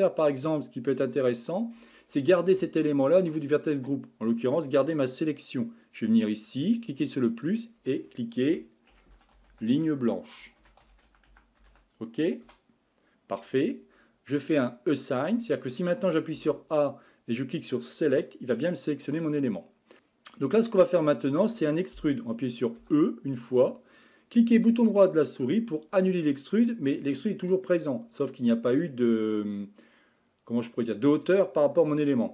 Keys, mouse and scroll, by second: 0.9 click, 2.2 scroll down 1, 2.6-3.9 shift+middle drag, 4.1 middle click, 4.8-5.2 scroll up 2, 6.7-10.8 drag, 14.5 click, 15.4 middle click, 16.3 a, 17.9 click, 18.6-19.9 middle drag, 19.9 scroll up 2, 20.4-22.8 middle drag, 22.8 e.